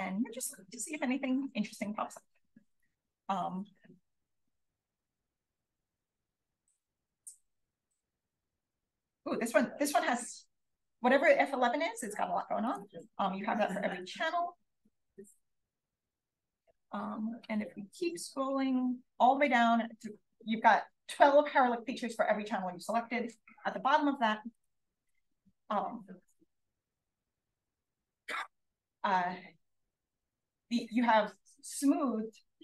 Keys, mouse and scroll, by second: 3.4-3.9 scroll up 2, 5.8-7.7 scroll up 2, 7.7-8.5 scroll up 1, 15.2 Down, 17.1-19.7 scroll up 1, 19.7-24.6 scroll up 1, 24.6-26.6 scroll up 1, 26.6-27.8 scroll up 1.